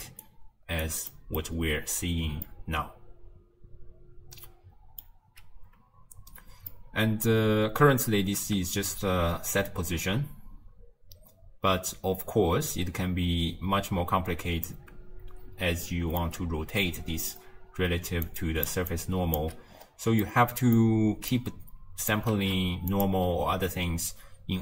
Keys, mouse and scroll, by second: 0.0-0.9 typing, 0.3 right click, 1.2 middle click, 1.6 scroll up 1, 1.8-2.5 scroll down 9, 2.5-5.7 middle drag, 6.8 middle click, 7.3-7.7 scroll up 2, 8.5 space, 14.1 space, 14.3-14.6 scroll up 2, 14.7-17.8 middle drag, 17.9-19.5 typing, 18.3 click, 18.9 click, 19.8-20.3 scroll up 3, 20.3-21.4 middle drag, 21.4 click, 22.4 ctrl+shift+d.